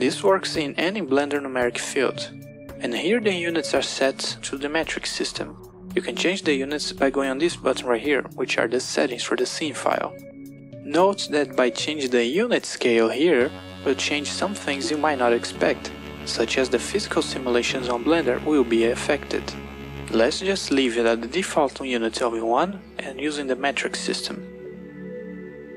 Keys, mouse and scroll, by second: 0.9-3.4 drag, 9.0 click, 11.0 click, 22.6 click.